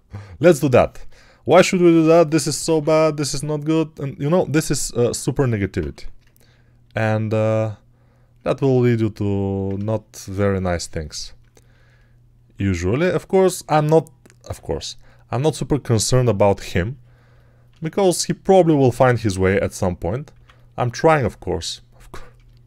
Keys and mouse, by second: 1.7-2.7 typing, 6.1 ctrl+1, 13.5 x, 19.2 p, 19.8 [, 20.2 [.